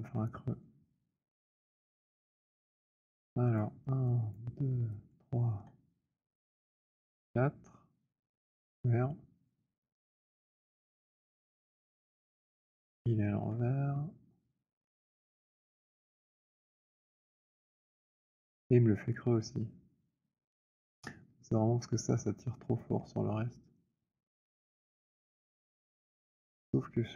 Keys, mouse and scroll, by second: 3.5 click, 4.4 shift+click, 5.1 click, 7.1 shift+click, 9.5 click, 10.7 click, 11.1 click, 12.4 click, 15.5 right click, 16.4 click, 20.7 alt+click, 22.7 click, 25.8 alt+click.